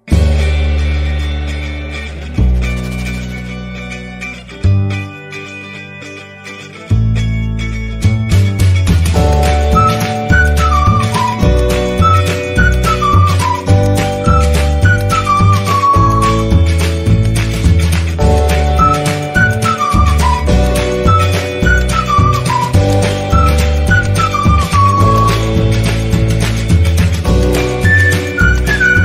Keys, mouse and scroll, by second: 5.8-18.1 drag, 20.3 click, 23.7 click, 27.5 click.